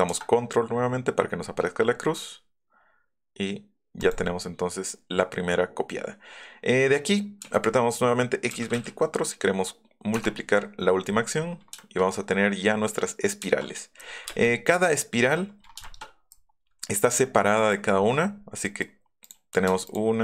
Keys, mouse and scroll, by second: 4.0 click, 4.5 scroll down 1, 8.5 KP_2, 10.1 Return, 11.2 middle click, 14.0 middle click, 14.3 space, 14.5 middle click, 15.8 shift+click, 17.5 middle click, 17.9-18.4 scroll up 2, 18.6 middle click, 19.2 middle click, 19.8 shift+click.